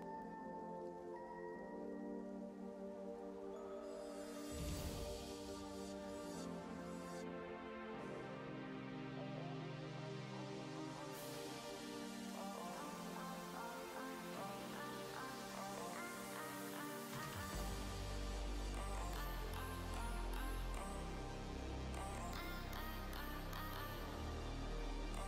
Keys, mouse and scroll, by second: 3.1 b, 3.6 middle click, 4.2-5.1 scroll down 4, 5.1-7.0 middle drag, 7.0-9.3 e, 9.7 scroll down 2, 10.3-13.3 e, 13.7-16.7 middle drag, 21.0 click, 21.3 scroll up 1, 21.4-23.2 middle drag, 23.2-24.3 scroll down 1, 24.3-25.2 middle drag.